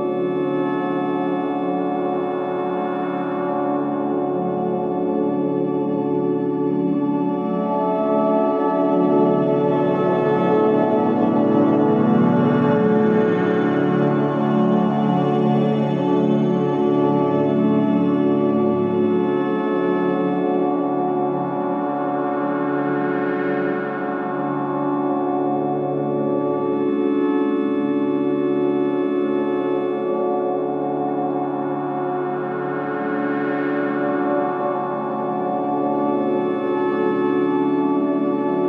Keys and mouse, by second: 4.7 ctrl+z, 4.9 ctrl+z, 7.3-7.9 middle drag, 9.1 middle click, 12.8-14.9 middle drag, 16.3 Tab, 17.2 middle click, 17.6 Tab, 18.1-18.8 middle drag, 18.6 alt+z, 19.0-20.2 middle drag, 21.3 shift+middle click, 22.2 middle click, 24.2-25.3 middle drag, 26.1 middle click, 26.4-28.4 middle drag, 28.7-30.2 middle drag, 31.1 middle click, 32.0-33.1 shift+middle drag, 33.7-35.7 shift+middle drag, 37.5 middle click.